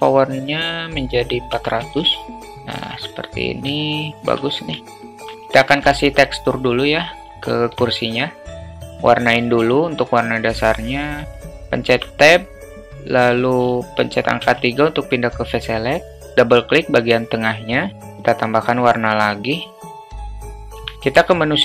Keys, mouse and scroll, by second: 1.9 0, 3.9-4.3 alt+shift+middle drag, 5.0 alt+middle click, 5.4 alt+shift+middle drag, 6.7 click, 7.5 alt+middle click, 9.5 click, 11.9 Tab, 14.5 3, 15.9 click, 18.8 click, 19.2 click, 19.8 click, 20.5 Tab, 20.8 Tab.